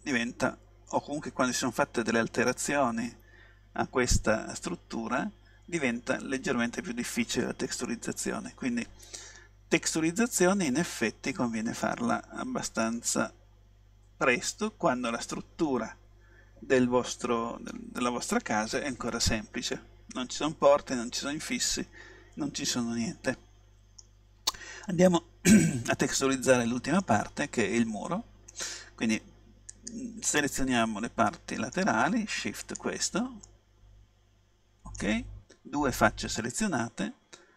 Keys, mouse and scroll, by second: 2.5-4.4 middle drag, 5.1 middle click, 7.9-10.1 middle drag, 12.9-14.9 middle drag, 19.8-21.7 middle drag, 24.9-26.7 middle drag, 29.8 right click, 30.6-31.6 middle drag, 32.7-34.5 right drag, 33.5-35.3 middle drag.